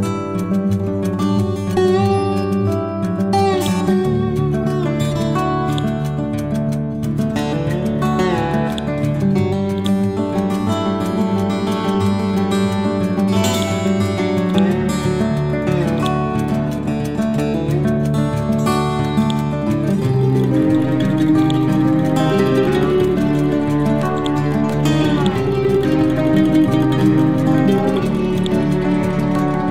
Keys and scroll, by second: 0.0 F12, 1.0 2, 1.3 5, 1.5 Return, 25.0 c.